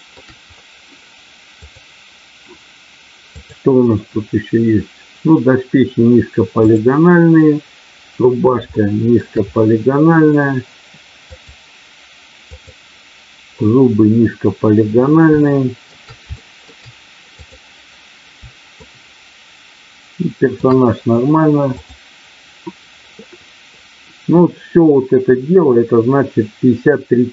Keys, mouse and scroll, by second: 1.6 click, 3.4 click, 6.6 click, 8.8 shift+middle click, 11.4 click, 12.5 click, 15.4 shift+middle click, 16.2 shift+middle click, 17.4 click, 18.7-20.5 shift+middle drag.